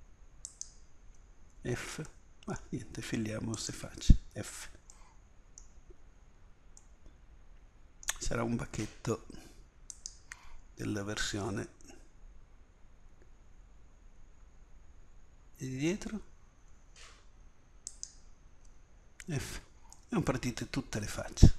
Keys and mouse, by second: 1.5 f, 4.3 f, 5.4-6.4 middle drag, 10.9 f, 17.9-19.2 drag, 19.2 f, 20.5 middle click.